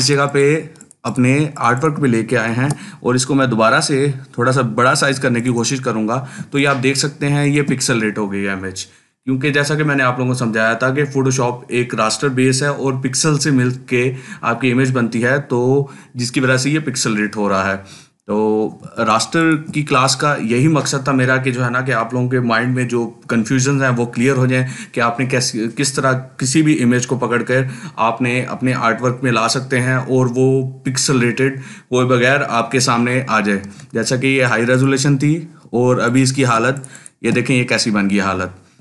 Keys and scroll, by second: 0.4 ctrl+space, 2.3 ctrl+t, 6.3 ctrl+space, 6.8 ctrl+space, 18.7 ctrl+space, 38.6 ctrl+space.